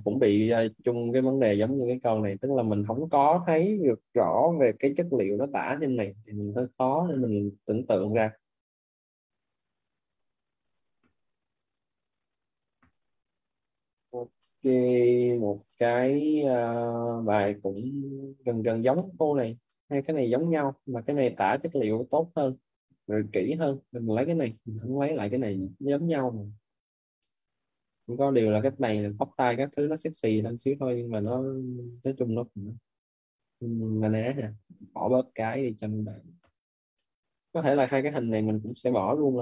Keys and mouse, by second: 1.2 click, 5.3 middle click, 10.2 click, 14.2 middle click, 17.5 middle click, 20.1 click, 24.3 middle click, 25.1 click, 27.0 middle click, 27.5 click, 31.0 middle click, 35.4 Delete, 36.8 middle click, 37.4 click, 38.4 middle click.